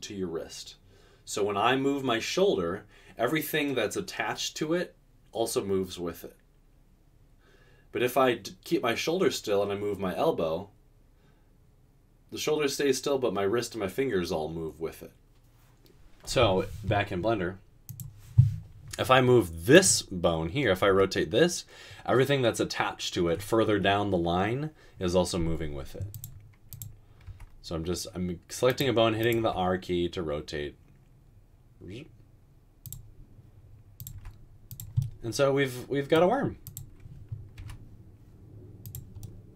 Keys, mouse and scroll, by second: 21.0 typing, 27.5 typing, 29.4 typing, 34.4 typing, 37.6 typing.